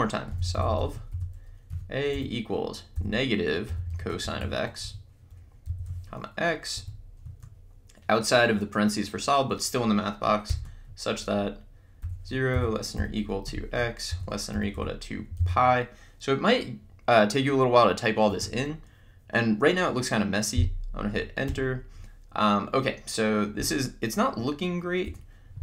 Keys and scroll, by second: 0.0-6.4 typing, 6.8 Right, 12.0-15.9 typing, 21.5 Return, 25.1 BackSpace.